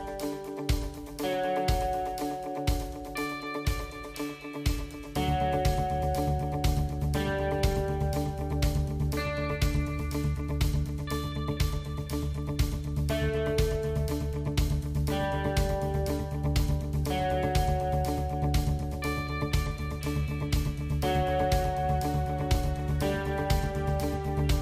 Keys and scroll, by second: 14.6 KP_1.